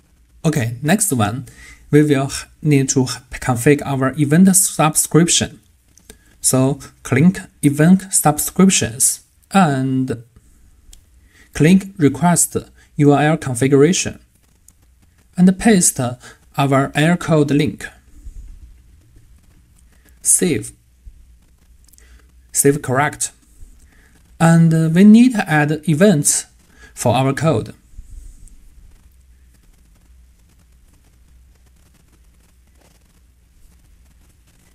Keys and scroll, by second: 17.9 super+c, 19.0 super+v.